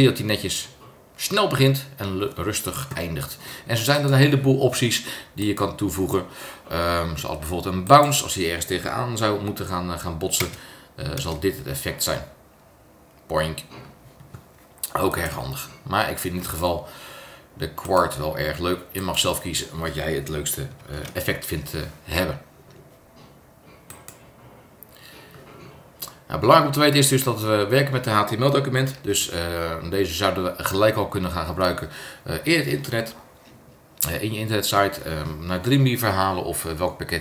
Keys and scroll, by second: 10.4 super+Return, 20.9 super+Return, 29.1 super+s.